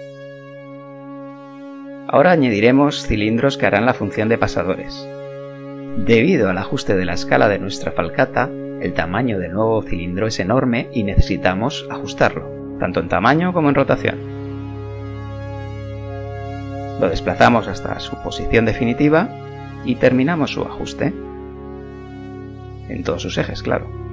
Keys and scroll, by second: 6.8 KP_1, 15.7 g, 19.3 s, 20.6 g.